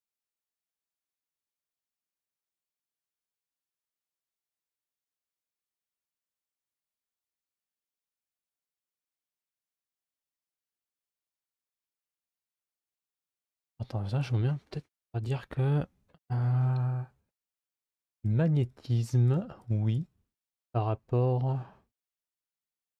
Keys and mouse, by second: 5.0 s, 7.7-8.8 middle drag, 9.3 middle click, 17.3-17.9 drag, 18.1 click, 19.1 click, 19.4 click, 19.7-22.9 drag.